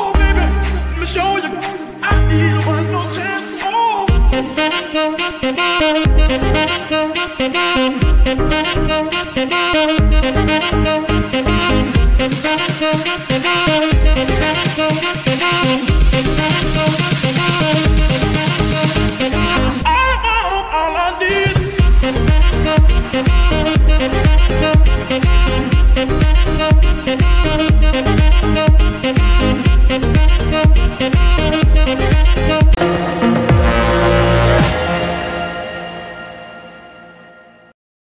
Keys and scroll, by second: 3.6 r, 7.7 Escape, 9.3 r, 9.5 y, 15.9 alt+r, 17.3 r, 21.4 Escape, 21.8 g, 23.1 Escape, 23.8 g, 24.8 Escape, 25.6 g, 26.9 Escape, 27.7 g, 29.7 Escape, 31.0 r, 31.2 r, 32.7 Escape.